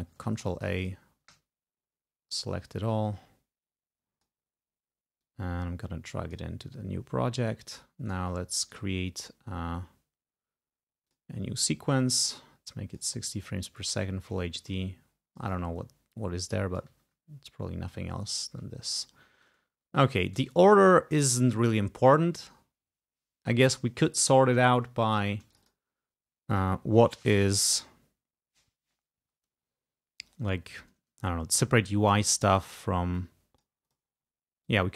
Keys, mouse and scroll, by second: 0.2 ctrl+a, 2.6-3.8 drag, 5.4-6.6 drag, 8.2 right click, 8.6 click, 8.7 right click, 11.2 click, 12.1-13.2 drag, 13.9 click, 14.5-17.1 drag, 18.2-18.6 ctrl+scroll down 2, 19.0-19.7 ctrl+scroll up 3, 19.9-20.2 ctrl+scroll up 2, 24.0 ctrl+scroll up 2, 25.6 click, 26.6 click, 27.5-28.1 ctrl+scroll up 2, 28.1 ctrl+scroll down 2, 28.7 ctrl+scroll down 2, 30.1 ctrl+scroll down 2, 33.3 click, 34.8 click.